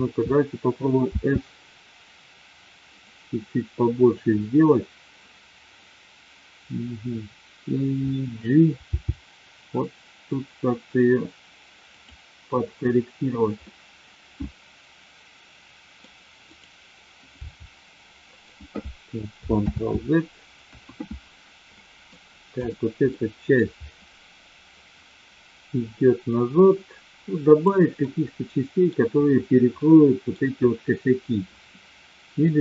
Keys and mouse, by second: 1.0 s, 8.9 g, 12.0 click, 13.6-16.0 middle drag, 17.5 g, 19.7 ctrl+z, 20.6 KP_1, 21.6-22.1 middle drag, 22.6 click, 23.1-23.5 middle drag, 24.7-27.7 drag, 28.0-28.9 middle drag, 29.9-30.2 middle drag.